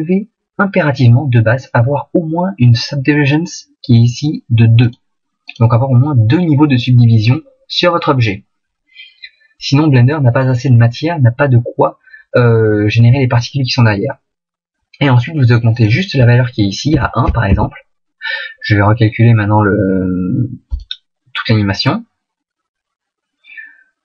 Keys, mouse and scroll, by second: 22.6 click.